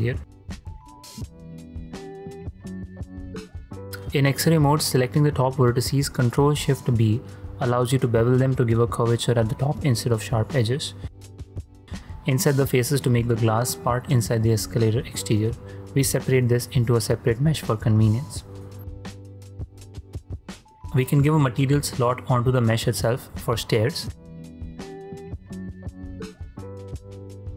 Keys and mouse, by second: 2.8 click, 3.2 middle click, 3.7 middle click, 3.9 ctrl+v, 4.1 ctrl+b, 5.9 ctrl+b, 8.5 click, 8.9 Tab, 9.2 drag, 9.3 middle drag, 9.4-9.8 drag, 9.8 middle click, 10.1 alt+z, 10.3 shift+middle drag, 10.5 click, 10.7 ctrl+middle click, 11.1 shift+middle drag, 11.4 middle click, 15.3 click, 15.4 middle click, 15.7 p, 16.7 Tab, 17.1-18.6 drag, 21.3 shift+click, 22.8-25.5 drag.